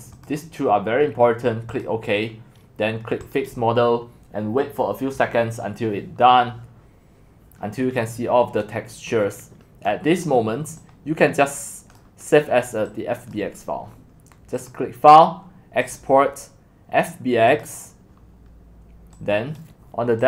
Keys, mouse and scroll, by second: 0.0-7.9 drag, 10.8 middle click, 12.2-16.2 drag.